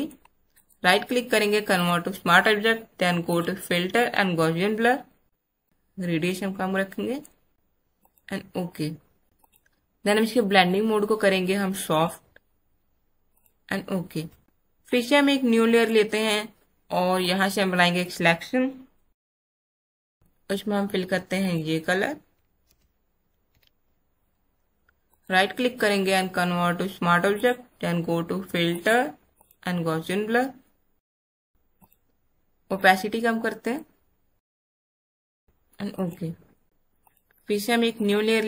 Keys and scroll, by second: 22.7 alt+BackSpace, 23.4 ctrl+alt+d.